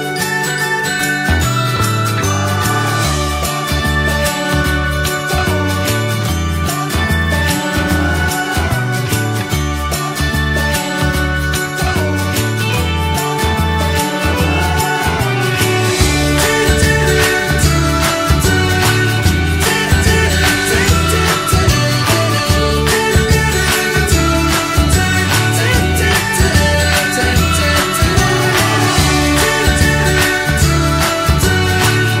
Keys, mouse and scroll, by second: 0.1 middle click, 0.4-1.0 scroll up 2, 0.6 shift+middle click, 1.0-4.4 middle drag, 4.4 click, 4.8 middle click, 5.7 ctrl+shift+b, 9.5 middle click, 10.2 click, 11.3 ctrl+shift+b, 13.2 click, 13.5-14.7 shift+middle drag, 14.7 click, 15.0 middle click, 15.7 click, 16.6 ctrl+z, 16.9 click, 17.8 ctrl+z, 18.9 click, 20.5-20.8 scroll down 2, 20.8 middle click, 21.4 click, 22.1-23.6 middle drag, 23.6 click, 25.0 click, 30.9 click.